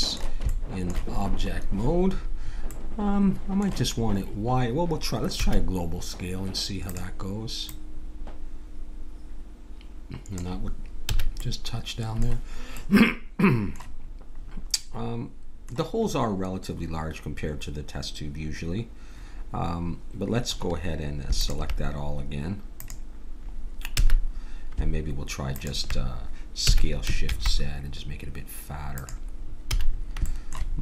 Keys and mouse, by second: 0.9-3.0 middle drag, 5.3 s, 7.7-9.5 drag, 11.1 a, 11.4-12.8 middle drag, 21.4-27.2 drag, 23.9 a, 26.6 s, 29.6 a.